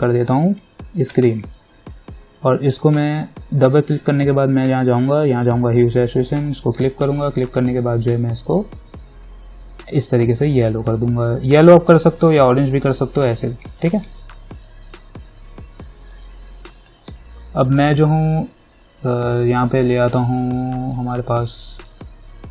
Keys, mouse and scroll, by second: 0.0-13.9 drag, 16.3 click, 20.1 click.